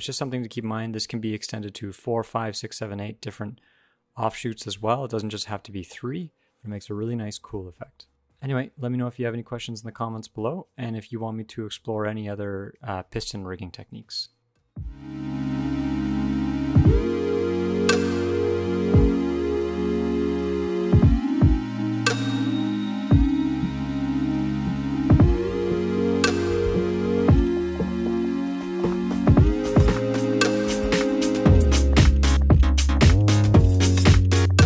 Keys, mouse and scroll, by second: 0.4-0.8 scroll up 1, 0.4 g, 7.7 middle click, 10.5-12.0 typing.